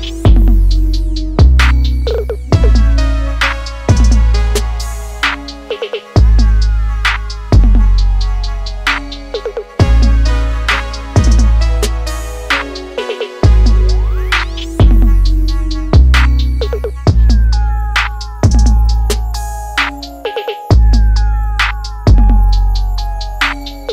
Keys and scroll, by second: 8.8 s, 10.5 g, 13.6 d, 16.8 z.